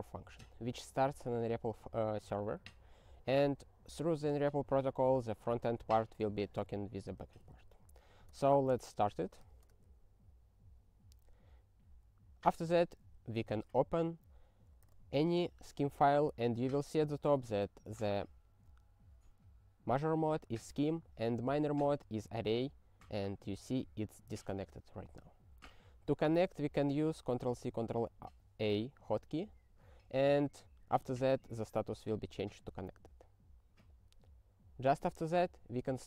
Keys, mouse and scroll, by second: 8.2 Return, 9.6 s, 12.6 click, 12.8 click, 25.0 click, 25.2 click, 27.4 ctrl+a, 33.8 click, 33.9 click.